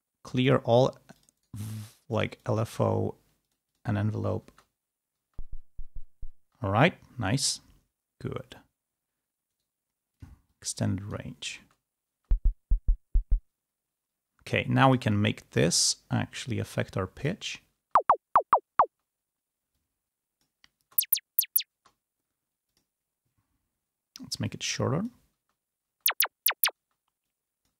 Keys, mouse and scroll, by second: 0.3 click, 1.0 click, 1.2 right click, 2.0 click, 2.6 right click, 3.3 click, 4.3 space, 5.1 space, 6.3 space, 9.4 right click, 10.0 click, 10.4-11.4 drag, 11.4 space, 13.4 space, 14.7 click, 16.4-17.4 drag, 17.7 space, 18.8 space, 19.6 click, 20.7 space, 21.7 space, 22.6 click, 24.3 click, 25.4 space, 26.8 space, 27.1 click.